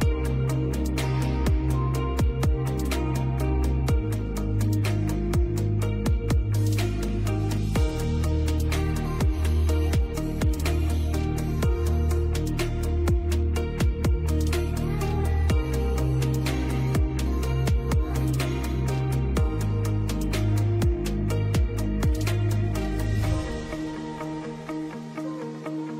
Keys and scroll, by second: 7.2 space, 7.5 F3, 14.4 F2, 23.8 space, 24.4 ctrl+Page_Down, 25.8 ctrl+z.